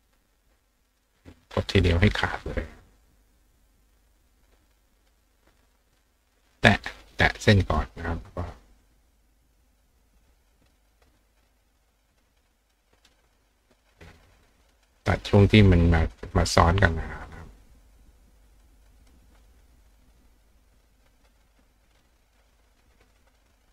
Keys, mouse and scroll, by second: 0.5 click, 6.6 click, 12.7 click, 15.3 click, 18.6 click, 20.9 click, 23.2 click.